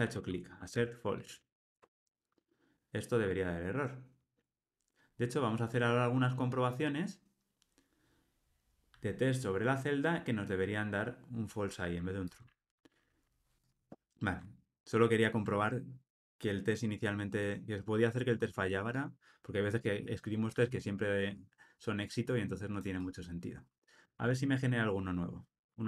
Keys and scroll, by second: 1.8 Escape, 14.5 super+z.